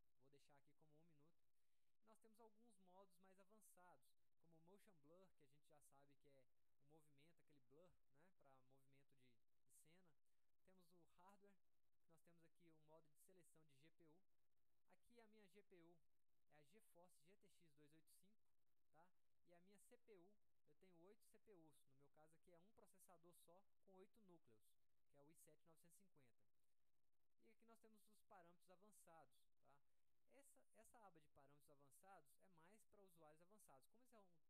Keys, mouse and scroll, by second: 0.7 click, 10.7 click, 19.4-20.0 drag, 22.5 click, 26.2 click, 27.5 click, 33.1-33.7 drag.